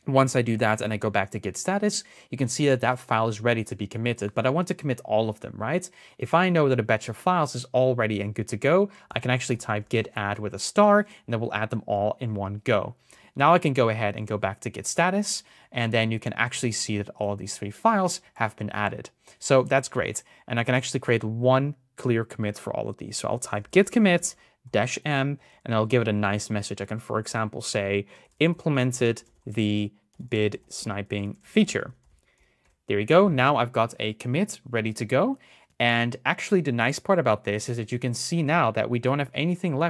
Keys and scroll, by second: 0.0 Up, 13.1 Up.